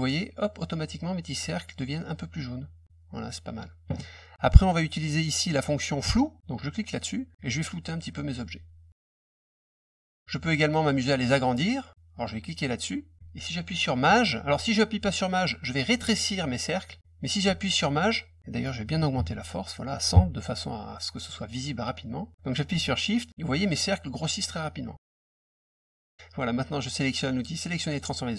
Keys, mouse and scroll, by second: 6.7 click, 7.3-9.5 drag, 12.4 click, 15.2-16.8 drag, 23.2-25.5 shift+drag, 27.8 click.